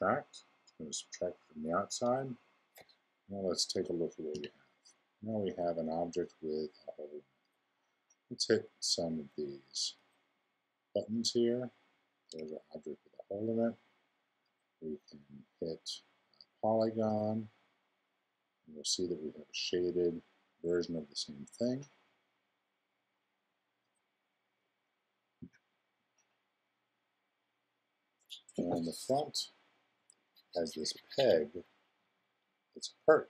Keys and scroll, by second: 4.3 i, 25.4 0.